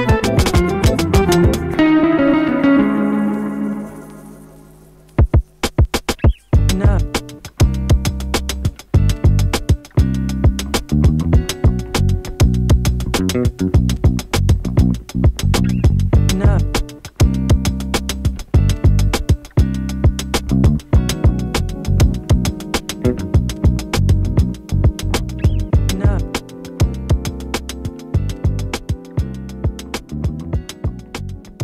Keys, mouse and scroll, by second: 1.2 click, 5.0 ctrl+shift+d, 7.1 space, 10.1 click, 11.2-12.3 typing, 12.8 click, 18.4 Return, 19.5 click, 21.9 Return, 22.7 space, 24.5 click, 25.1 space, 27.8-30.1 drag, 30.1 space.